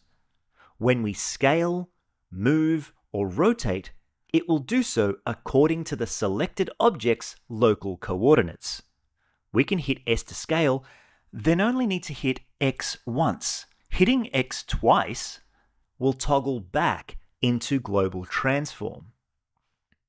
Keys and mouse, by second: 0.0 click, 0.5-1.9 drag, 2.4 click, 3.1-6.3 drag, 10.2 s, 11.0 x, 14.5 s, 15.1 x, 15.4 x.